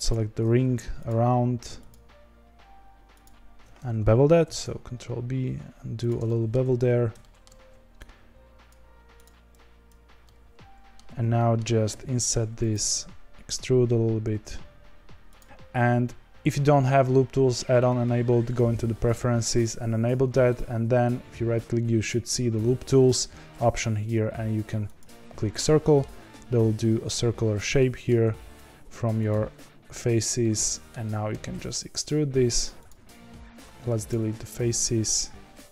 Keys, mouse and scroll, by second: 0.0 alt+click, 1.0 alt+shift+click, 1.8 alt+shift+click, 4.4 ctrl+b, 6.2 middle click, 6.8 z, 7.1 shift+middle click, 7.6 3, 8.6 click, 9.2 click, 10.2-11.8 middle drag, 12.7 g, 24.9 right click, 25.6-28.2 middle drag, 28.2 s, 30.4 middle click, 31.2 e, 33.3 middle click, 34.0 x, 34.7 2.